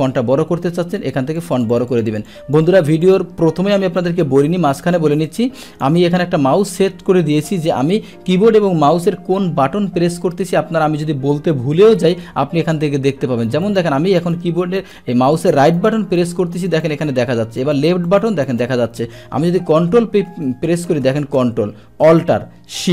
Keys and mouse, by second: 1.4 click, 1.5 click, 1.7 click, 1.9 click, 2.1 click, 2.3 click, 2.6 click, 3.0-3.5 drag, 5.3 click, 13.6 right click, 14.2 right click, 14.8 right click, 15.3 right click, 15.8 right click, 16.2-16.7 right drag, 16.7 click, 17.6 click, 18.0 click, 18.5 click.